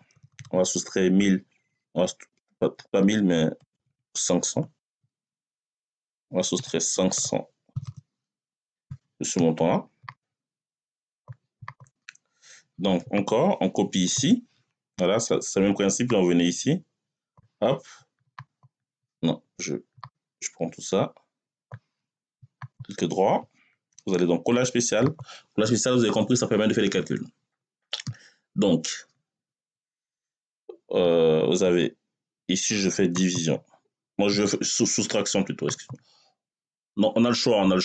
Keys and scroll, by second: 0.0-0.4 typing, 2.6 BackSpace, 4.7 5, 6.4 BackSpace, 7.0 5, 8.4 Return, 13.9 ctrl+c.